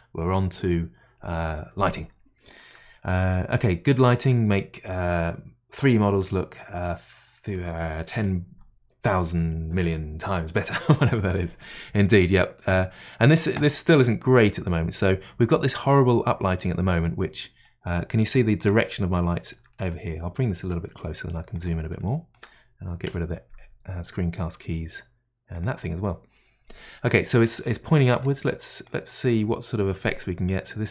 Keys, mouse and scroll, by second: 17.6-18.8 middle drag, 18.8 scroll up 1, 19.2-20.9 shift+middle drag, 20.9 g, 22.0-23.0 middle drag, 23.0 n, 23.5-24.6 scroll up 3, 25.5 click, 27.7-28.8 middle drag, 28.8-30.9 drag.